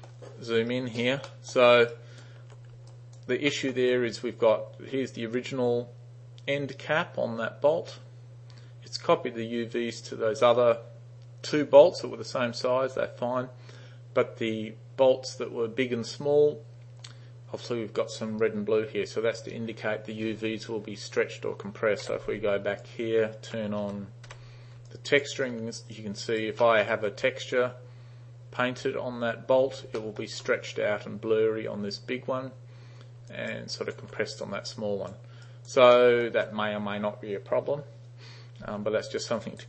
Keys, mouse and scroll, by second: 0.8 alt+right click, 1.3 alt+middle drag, 2.0 alt+right click, 3.0 alt+right click, 3.6 alt+middle click, 22.1 3, 22.9-23.5 alt+drag, 23.9 t, 24.3 t, 24.9-25.3 alt+drag, 25.5 alt+right click, 26.0 alt+click, 26.7 alt+middle click, 30.0 alt+middle drag, 33.3 alt+click, 33.7 alt+right click, 34.7 alt+right click, 35.5 alt+right click, 36.0 alt+middle click, 39.3 alt+right click.